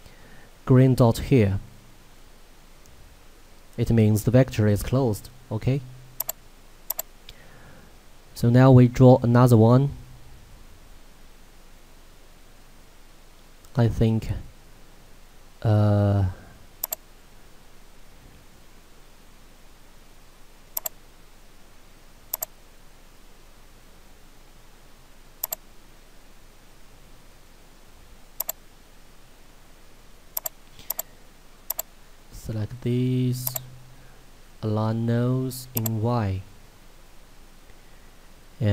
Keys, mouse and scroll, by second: 6.2 click, 16.9 click, 18.2 scroll up 1, 20.8 click, 25.5 right click, 26.7-27.2 scroll up 1, 28.5 click, 30.7 z, 30.9 right click, 31.7 click, 33.5 right click, 35.8 click.